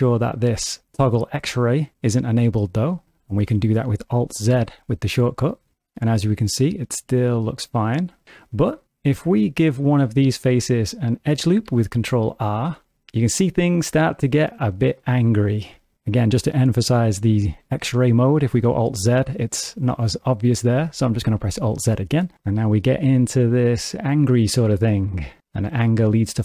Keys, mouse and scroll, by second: 3.3 ctrl+alt+space, 4.4 alt+z, 5.9 middle click, 9.1 click, 11.6 ctrl+r, 16.4 middle click, 18.5 alt+z, 19.0 middle click, 20.9 alt+z, 21.5 shift+middle click, 22.1 middle click, 22.4 ctrl+middle click, 25.6 middle click.